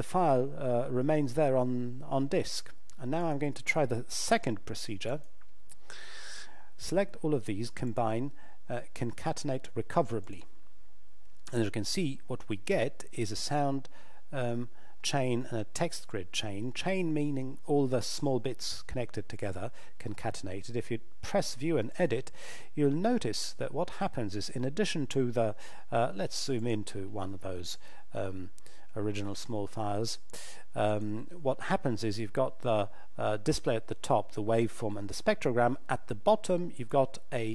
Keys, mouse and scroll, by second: 3.2 click, 5.1 shift+click, 7.8 click, 21.9 click, 26.6 click, 30.8 click, 36.8 click.